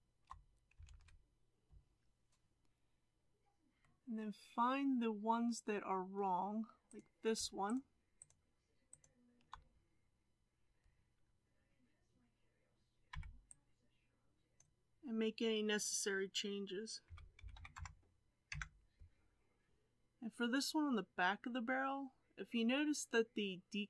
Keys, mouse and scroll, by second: 0.8 alt+a, 3.8-6.9 middle drag, 6.9 click, 7.7 shift+click, 8.2 shift+click, 8.9 shift+click, 14.5 b, 17.0 r, 19.7-23.8 middle drag.